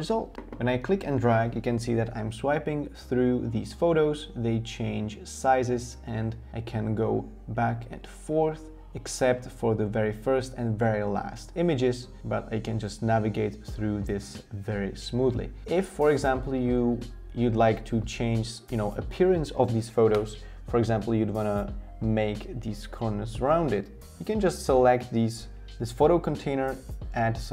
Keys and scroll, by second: 26.3 shift+Page_Up, 26.8 shift+Page_Up.